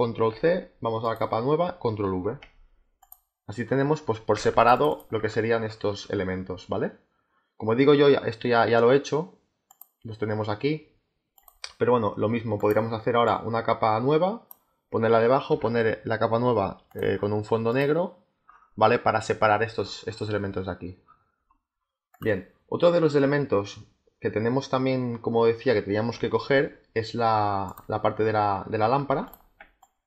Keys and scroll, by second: 0.2 ctrl+c, 2.0 ctrl+v, 4.3 z, 15.4 g.